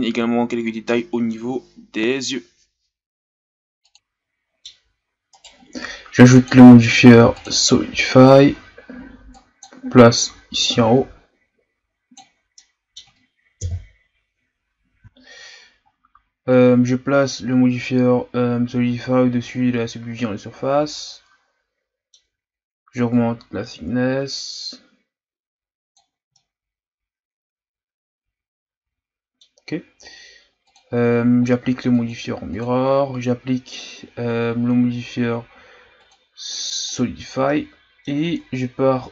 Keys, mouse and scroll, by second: 0.4 scroll up 1, 0.5 Tab, 0.8 alt+right click, 1.0 scroll up 1, 1.2 s, 2.4-3.6 scroll down 2, 2.5 Tab, 3.6-4.9 middle drag, 4.9-5.4 scroll up 2, 5.4 right click, 7.4-9.6 drag, 10.7-12.5 drag, 12.5-13.6 middle drag, 13.6 KP_1, 15.1-17.9 scroll down 4, 19.4-20.9 scroll down 3, 20.9-23.2 middle drag, 23.2-26.1 drag, 26.3-29.3 middle drag, 30.6-37.5 drag, 37.5-38.2 middle drag, 38.2 Tab, 38.8-39.1 scroll down 1.